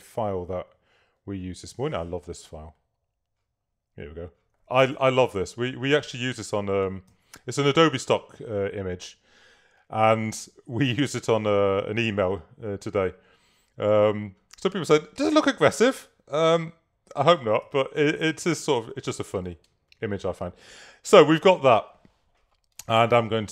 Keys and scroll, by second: 5.0 super+-, 7.6 super+-, 17.7 super++, 19.6 super+space, 20.2 space.